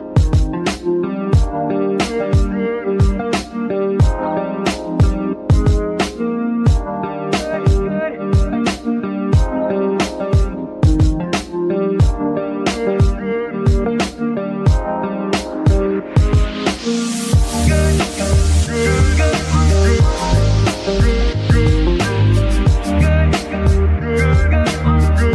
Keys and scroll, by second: 0.6 z, 1.7 g, 3.6 Escape, 3.8 z, 4.2 g, 5.2 Escape, 5.9 z, 6.8 g, 9.7 Escape, 13.7 z, 14.7 g, 14.9 y, 16.8 r, 17.3 Escape, 17.6 z, 18.3 r, 18.4 r, 19.2 Escape, 19.8 r, 22.1 alt+r, 22.6 r, 22.7 r.